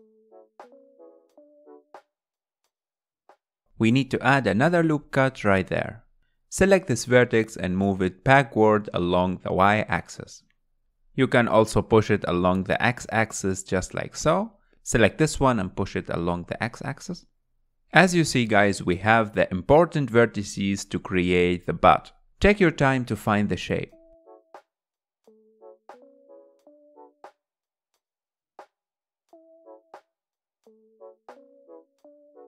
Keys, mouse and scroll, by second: 0.3 g, 0.6 click, 0.7 g, 1.2 click, 1.3 g, 1.6 middle click, 2.0 click, 2.1 g, 2.5 click, 3.0 middle click, 3.4 ctrl+r, 4.6 scroll down 3, 4.8-7.9 middle drag, 8.5 scroll up 3, 8.9 click, 9.5 scroll up 2, 9.9 middle click, 10.5 click, 12.5-14.3 middle drag, 14.3 click, 15.4 click, 16.4 click, 17.7 click, 18.0 middle click, 18.9 click, 20.0-21.3 middle drag, 21.3 click, 22.0 click, 23.6 middle click, 24.2 click, 24.7 g, 25.3 click, 25.3 g, 25.9 g, 26.4 scroll down 2, 26.5 middle click, 26.9 click, 27.0 g, 28.2 click, 28.3 g, 28.7 click, 28.8 g, 29.6 click, 30.2 g, 30.6 click, 30.7 g.